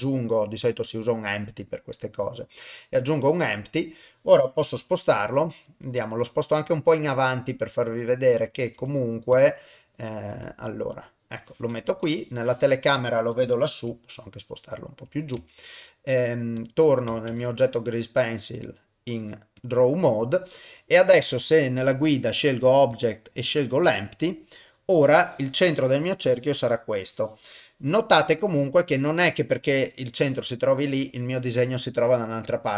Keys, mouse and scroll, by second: 2.7-4.0 middle drag, 5.1 g, 5.8 middle click, 6.5 g, 7.2-8.5 middle drag, 8.7 g, 9.5 middle click, 9.9 middle click, 10.3 g, 11.2 middle click, 11.9 KP_0, 13.8 g, 15.4 ctrl+Tab, 16.6 click, 17.3 ctrl+Tab, 21.1-24.5 drag, 25.2 click, 26.0 click, 27.1 click, 28.2-29.2 middle drag.